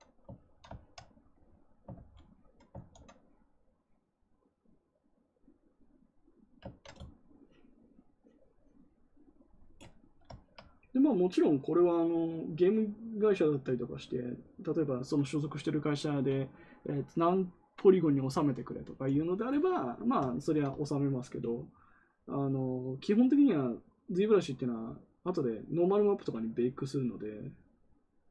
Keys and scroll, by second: 1.8 ctrl+z, 2.7 ctrl+z.